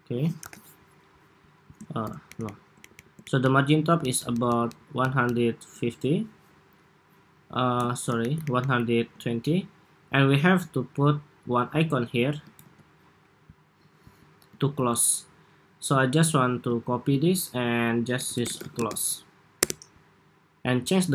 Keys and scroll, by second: 0.2 super+=, 2.0 alt+shift+Up, 2.2 alt+shift+Up, 2.8 alt+Up, 3.8 alt+Down, 4.3 alt+Down, 4.5 alt+Down, 4.9 alt+Down, 5.1 alt+Down, 7.9 alt+shift+Up, 8.4 alt+shift+Up, 12.3 super+c, 14.5 super+v, 16.8 super+r.